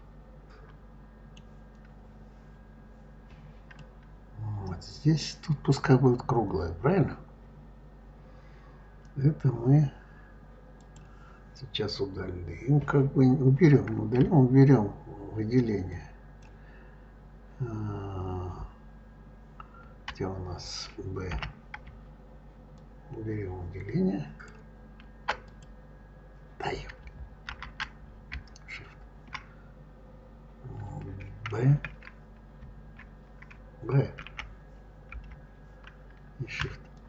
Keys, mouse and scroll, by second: 3.5 scroll up 1, 3.6-6.6 middle drag, 10.6 click, 15.7 ctrl+click, 21.2 b, 25.3 click, 27.3 ctrl+z, 31.4 b, 34.0 b, 35.4 b.